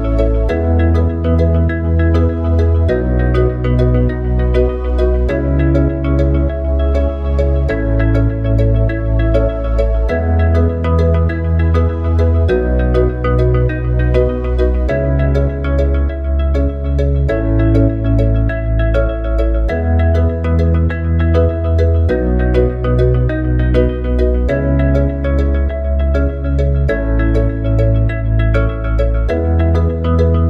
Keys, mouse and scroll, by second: 5.2 click, 6.0 Tab, 11.8 alt+click, 14.2 alt+shift+click, 20.3 alt+shift+click, 27.2 alt+shift+click.